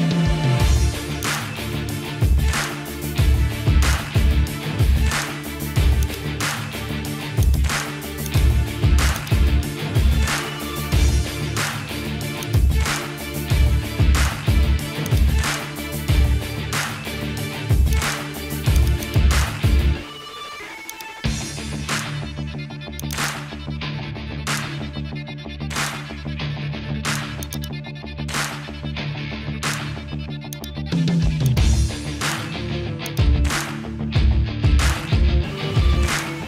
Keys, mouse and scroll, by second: 0.5 ctrl+Tab, 1.2 click, 1.8 g, 7.0 ctrl+z, 7.4 click, 8.2 click, 9.1 click, 9.8 Tab, 11.0 Tab, 11.8 ctrl+Tab, 16.6 ctrl+p, 20.9 click, 21.7 Tab, 23.1 click, 24.9 l, 25.5 ;, 26.3 a, 27.5 click, 30.2 Tab, 31.5 click, 32.4 ctrl+Tab, 33.1 click, 33.6 g.